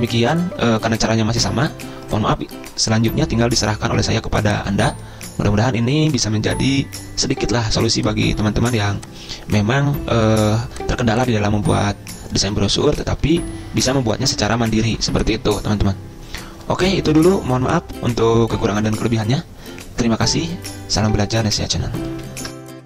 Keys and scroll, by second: 13.1 ctrl+], 13.2 ctrl+], 13.3 ctrl+], 13.4 ctrl+], 13.5 ctrl+], 22.4 ctrl+s.